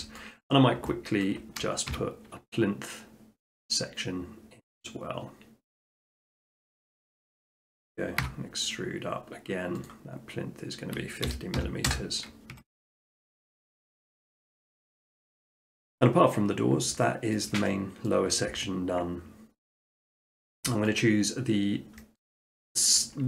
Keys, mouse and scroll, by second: 0.2 middle click, 0.5 middle click, 0.7-1.4 scroll, 2.0 r, 3.8-4.9 drag, 7.3-8.5 drag, 8.2 e, 8.7-9.8 drag, 10.0 click, 11.3-11.6 typing, 11.9 Return, 12.5 Tab, 13.0 middle click, 13.4 middle click, 13.7 shift+middle click, 14.5 middle click, 15.2 middle click, 16.9 middle click, 17.4 shift+middle click, 18.1 middle click, 19.8 click, 20.5 shift+middle click, 20.9 middle click, 21.3 middle click, 22.2 shift+middle click, 22.6 middle click.